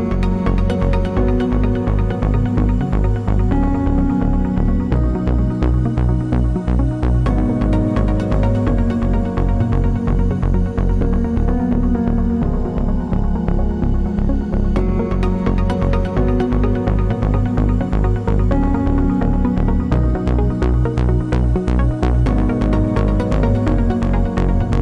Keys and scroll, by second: 4.9 Left, 5.2 Right, 16.8 Right, 16.9 Right, 17.3 Left.